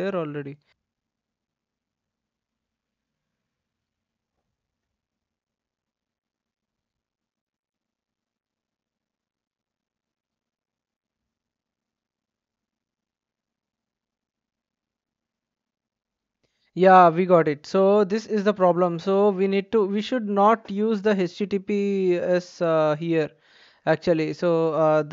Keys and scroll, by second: 4.8 BackSpace.